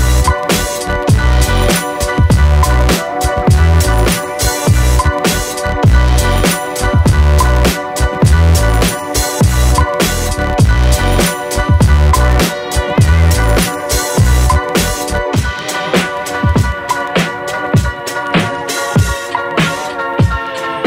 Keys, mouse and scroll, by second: 0.1 click, 0.4 ctrl+z, 0.9 click, 1.5 click, 1.9 click, 2.8-4.1 drag, 4.2-4.9 drag, 4.9 Tab, 5.1-5.7 alt+drag, 5.7-6.2 alt+middle drag, 6.2-6.6 alt+drag, 7.1 n, 7.4 Tab, 7.6 click, 7.8 Tab, 8.2 click, 8.7 click, 9.0 click, 9.5 click, 9.9 click, 10.6 click, 11.0 click, 11.6 click, 11.9 click, 12.5 Tab, 12.7-13.3 alt+drag, 13.7 n, 13.9 click, 14.1 n, 15.1 ctrl+s, 15.4-16.8 drag, 17.3 ctrl+s, 18.2 alt+click, 18.8-19.5 drag, 19.7 ctrl+z, 19.9-20.8 drag.